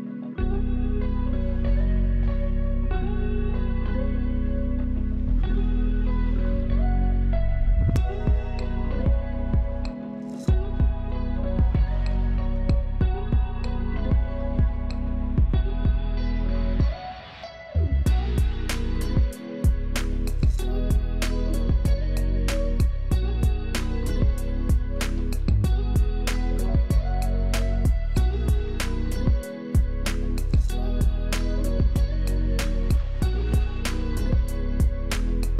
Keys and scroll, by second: 1.4 shift+space, 11.8 Delete, 12.6 alt+space, 13.7 ctrl+alt+space, 13.9 ctrl+alt+;, 14.6 ctrl+;, 15.3 ctrl+;, 16.1 ctrl+;, 16.5 space, 23.2 space, 23.9 alt+space, 27.1 space, 27.9 space, 28.5 space, 29.4 Delete, 30.1 alt+space, 30.8 space.